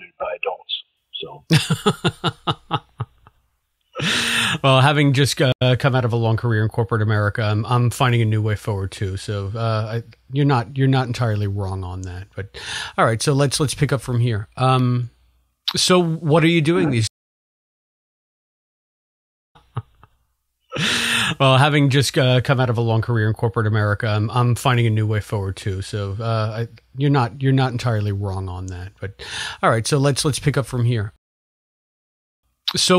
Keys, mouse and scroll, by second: 0.8 click, 1.6 click, 2.3 click, 3.1 click, 4.1-5.3 drag, 5.4 Delete, 6.7 click, 7.6 click, 8.3 ctrl+s, 11.3 click, 16.3-31.1 drag, 17.0 space, 19.4 space, 31.1 space, 31.8 ctrl+shift+Delete, 32.3 space.